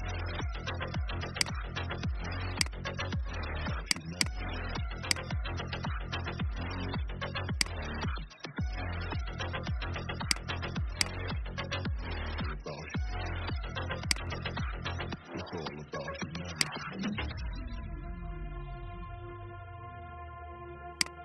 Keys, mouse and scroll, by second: 1.2 click, 5.7-6.0 alt+scroll down 1, 7.5 click, 8.0-8.6 alt+scroll up 1, 9.0-10.1 alt+scroll down 1, 10.1-12.9 drag, 14.0 alt+click, 16.4 shift+click, 18.7 ctrl+x, 19.5 ctrl+f, 20.8-21.2 drag.